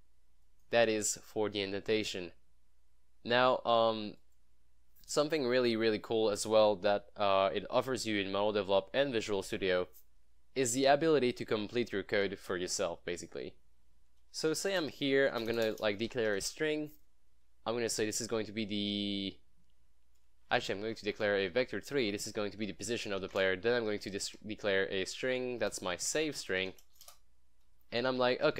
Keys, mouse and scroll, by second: 0.5 scroll up 1, 4.3 click, 5.9 click, 14.5-16.5 typing, 20.5-28.5 typing, 20.7 ctrl+shift+Left, 22.0 Down, 22.2 Tab.